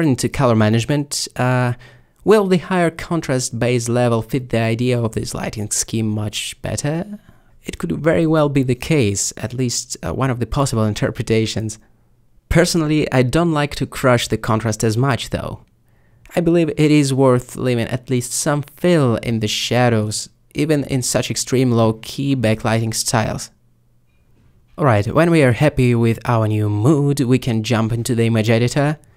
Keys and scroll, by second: 19.5 ctrl+space.